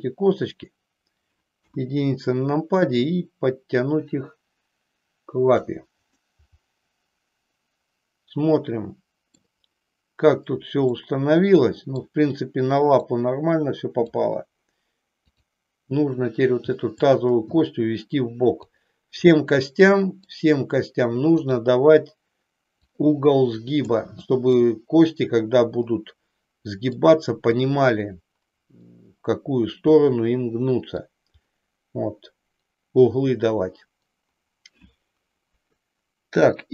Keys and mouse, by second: 1.6 KP_1, 3.0-5.6 drag, 6.1-9.5 middle drag, 10.9-12.1 middle drag, 13.1 click, 15.1 click, 17.0-18.8 drag, 19.3-20.3 middle drag, 21.4 click, 23.0 click, 24.5-27.0 middle drag, 29.0-31.0 middle drag, 35.5 KP_1.